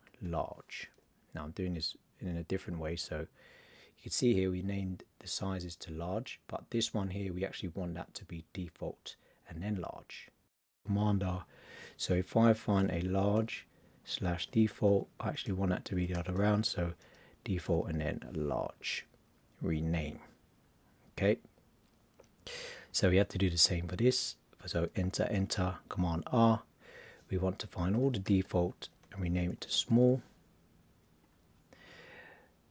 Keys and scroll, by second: 0.2 shift+l, 10.8 super+r, 12.7 shift+l, 14.2 shift+d, 15.9 shift+d, 17.6 shift+l, 25.9 super+r, 27.8 shift+d, 29.5 shift+s.